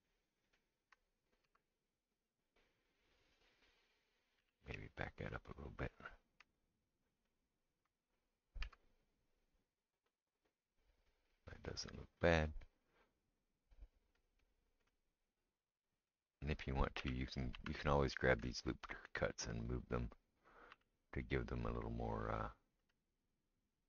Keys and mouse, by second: 0.5 ctrl+right click, 1.4 s, 4.4 g, 8.6 s, 17.0 3, 17.5 2, 18.5 alt+click, 20.7 g, 22.2-23.8 drag, 22.8 g.